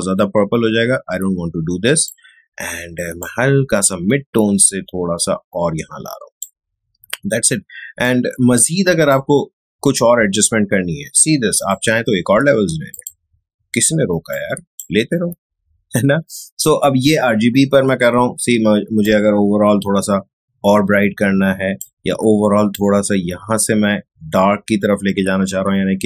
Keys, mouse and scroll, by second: 19.0-26.0 drag.